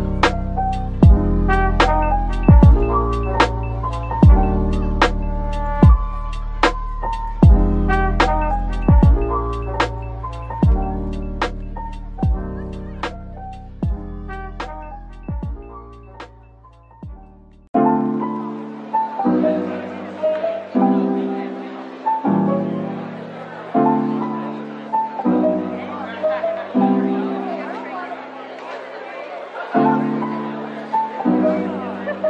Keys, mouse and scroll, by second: 0.0-1.4 typing, 2.4 shift+click, 4.3-8.6 typing, 9.7 middle click, 10.7-11.1 scroll down 1, 10.8-11.7 typing, 12.1 middle click, 13.3-15.6 typing, 22.6-23.4 scroll up 1, 24.5-25.3 typing, 26.6 typing, 28.0 middle click, 28.4 Tab, 28.6-29.5 scroll, 29.5 typing, 31.1 middle click.